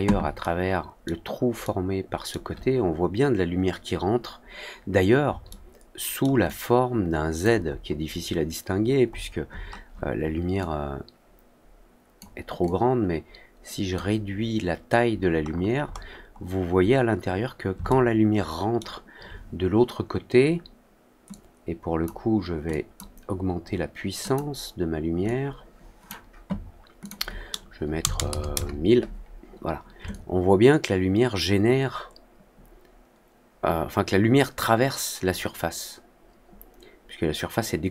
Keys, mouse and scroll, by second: 0.3-1.0 alt+middle drag, 1.5-2.2 alt+middle drag, 5.4-6.1 alt+middle drag, 6.4 alt+click, 7.6 alt+middle click, 8.0 alt+middle click, 9.0 alt+middle click, 9.4 alt+middle click, 10.5-12.1 drag, 12.1 scroll up 1, 12.6-13.9 drag, 15.4 middle click, 15.8 middle click, 16.2 middle click, 16.6 middle click, 17.0 middle click, 17.8-18.7 alt+middle drag, 21.2 click, 22.6 click, 24.2 click, 25.2 click, 26.9 click, 30.0-37.9 alt+drag.